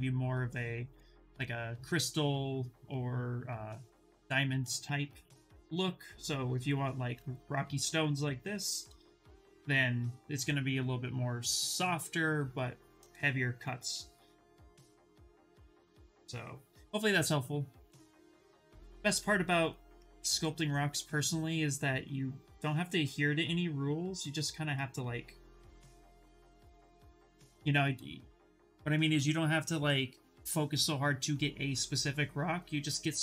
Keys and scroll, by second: 20.0 shift+f.